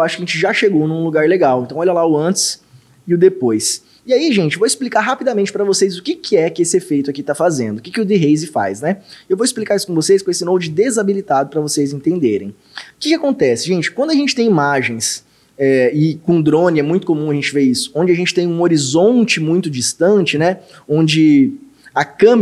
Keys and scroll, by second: 1.7 ctrl+d, 2.8 ctrl+d, 12.3 ctrl+d.